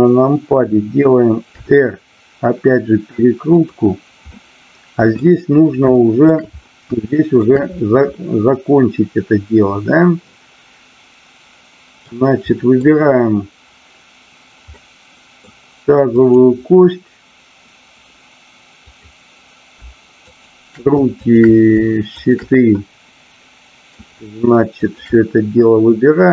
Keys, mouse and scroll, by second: 1.6 r, 3.5 click, 4.2 middle click, 6.0 shift+middle drag, 7.1 shift+middle click, 8.2-12.1 middle drag, 12.5-13.0 middle drag, 14.7-15.4 middle drag, 16.2-17.0 drag, 20.2 shift+click, 21.1-21.7 shift+drag, 22.0-22.9 shift+drag, 23.1-24.0 middle drag, 24.7 shift+click.